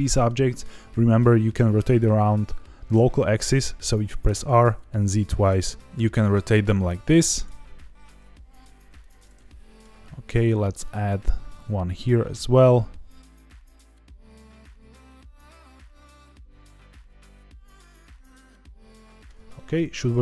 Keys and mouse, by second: 3.5 click, 4.2 r, 4.4 z, 4.6 z, 5.4 click, 5.8 Escape, 5.9 r, 6.1 z, 7.3 click, 7.5 g, 8.9 click, 9.3 middle click, 10.7 alt+d, 13.6 click, 13.7 r, 13.7 z, 13.8 z, 14.1 click, 14.2 middle click, 14.8 middle click, 14.9 alt+d, 15.7 click, 16.1 middle click, 16.4 alt+d, 16.9 click, 17.3-17.6 middle drag, 17.7 alt+d, 18.1 click, 18.1 r, 18.2 z, 18.3 z, 18.7 click, 18.8-19.2 middle drag, 19.5 shift+middle click.